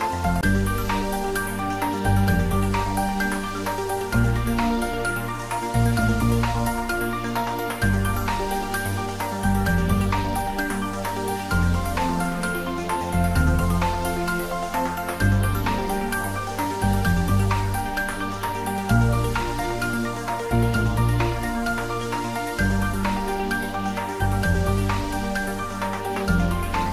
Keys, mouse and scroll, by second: 0.4 right click, 0.9 click, 1.5 middle click, 2.2 scroll up 1, 3.1-4.9 middle drag, 4.9 scroll down 1, 5.6 middle click, 7.1 click, 7.6 scroll down 1, 8.5-12.6 middle drag, 13.2 scroll down 1, 14.6 click, 16.6 click, 18.7 click, 20.9 shift+d.